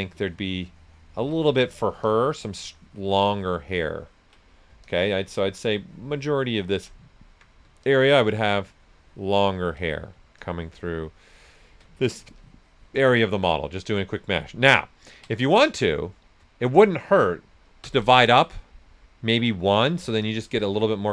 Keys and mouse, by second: 1.6 right click, 2.0-4.4 ctrl+drag, 4.4 right click, 4.8-7.1 ctrl+drag, 7.1 alt+right click, 7.8-10.1 ctrl+drag, 10.1 right click, 10.3-11.8 ctrl+drag, 11.8 ctrl+right click, 12.3 ctrl+alt+click, 13.6 s, 14.0 click, 14.4 alt+right click, 15.0 ctrl+click, 15.4 right click, 17.8 ctrl+d, 20.2 ctrl+click.